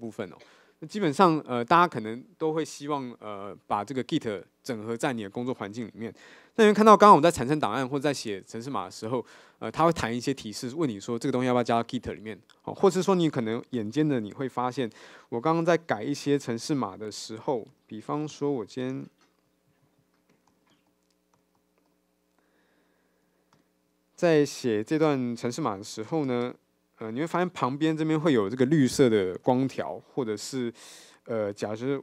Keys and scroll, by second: 18.5 ctrl+shift+super+k, 23.5 ctrl+shift+super+o.